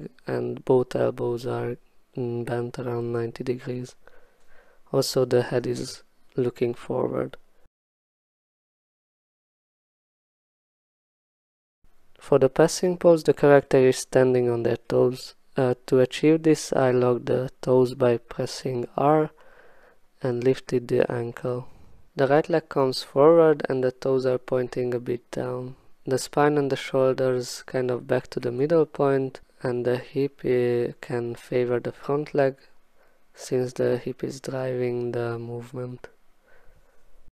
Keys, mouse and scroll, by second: 0.2 right click, 0.7 click, 1.4 ctrl+z, 2.1 middle click, 2.2 click, 2.7 click, 2.7 right click, 2.8 click, 3.1 right click, 3.6 click, 4.4 click, 4.7 click, 5.1 click, 5.4 click, 5.5 ctrl+z, 5.8 shift+click, 6.6 click, 6.8 click, 7.1 click, 7.3 click, 8.0 click, 8.2 click, 8.5 click, 8.7 ctrl+shift+z, 8.8 shift+click, 9.7 click, 10.2 click, 10.2 1, 10.4 click, 10.5 click, 10.9 click, 11.8 1, 12.0 shift+click, 12.1 w, 12.8 click, 13.1 click, 13.3 click, 13.3 e, 14.1 click, 14.3 click, 14.5 click, 14.6 click, 14.6 r, 15.0 w, 15.1 click, 15.8 click, 16.7 shift+1, 16.8 shift+click, 17.1 shift+click, 17.3 ctrl+z, 17.6 shift+click, 17.8 shift+click, 17.8 shift+click, 18.8 click, 19.0 click, 19.1 click, 19.8 click, 20.1 scroll, 20.3 click, 20.6 click, 20.7 click, 20.9-21.4 alt+scroll, 21.1 e, 22.4 click, 22.5 click, 22.7 click, 23.0 click, 23.1 click, 23.2 click, 23.7 click, 24.0 click, 24.1 w, 24.4 click, 26.9 click, 27.8 click, 27.9 click, 28.2 click, 28.4 click, 28.6 click, 28.9 click, 29.1 click, 29.4 click, 29.7 click, 30.0 click, 30.4 e, 30.8 click, 31.1 click, 31.2 shift+click, 31.4 ctrl+alt+z, 31.5 shift+click, 31.6 middle click, 32.0-32.6 scroll, 32.6 click, 32.7 click, 33.2 w, 33.5 click, 33.7 ctrl+z, 34.2 click, 34.4 click, 34.9 click, 35.1 click, 35.2 click, 36.3 click, 36.5 e, 37.1 click.